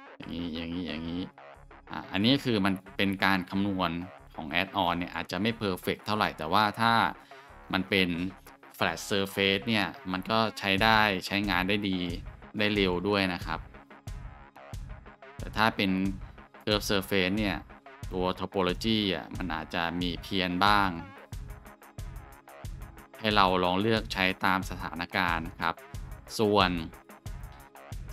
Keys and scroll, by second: 2.4-2.9 scroll, 13.6 g, 25.5 Tab.